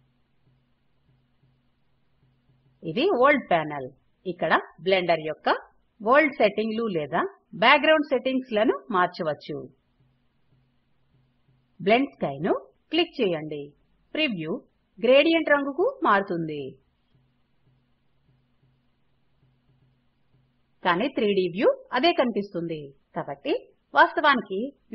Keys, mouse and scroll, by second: 10.2 click.